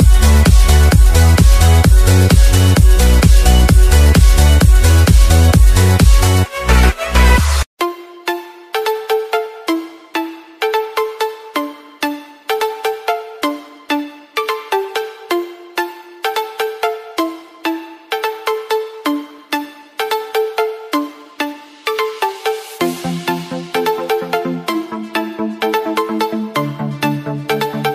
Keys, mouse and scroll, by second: 4.2 Tab, 4.7-5.2 scroll up 1, 5.2 click, 8.2 Down, 9.2 Tab, 11.2 click, 12.4 alt+Tab, 13.3 BackSpace, 14.0 Down, 14.8 u, 16.2 BackSpace, 18.2 u, 20.4 Return, 21.7 click, 25.0 alt+Tab, 25.8 click, 26.7 v, 27.2 click.